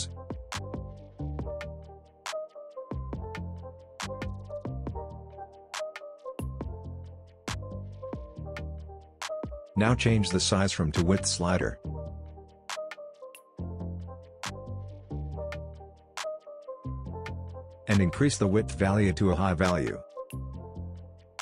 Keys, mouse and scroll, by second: 12.5 scroll up 1, 14.3-15.4 scroll down 1, 15.4-16.9 scroll up 1, 16.9-21.2 drag.